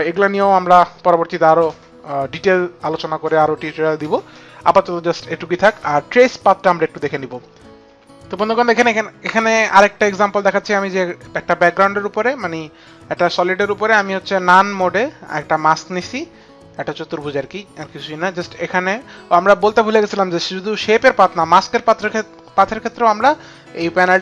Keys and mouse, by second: 13.7 click.